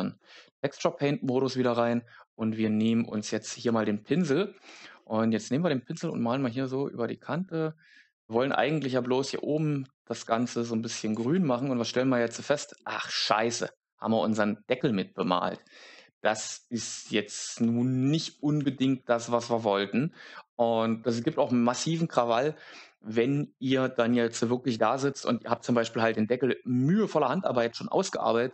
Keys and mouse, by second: 2.7 click, 6.0 click.